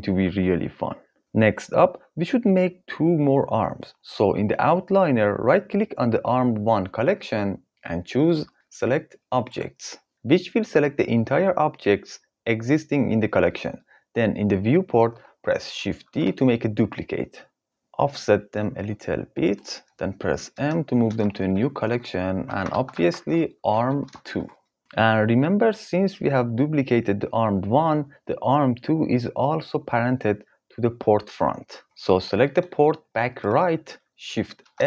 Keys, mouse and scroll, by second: 7.4-9.8 drag, 15.8 shift+d, 17.7 g, 20.1 m, 24.7 Return, 30.1 g, 34.2 shift+s.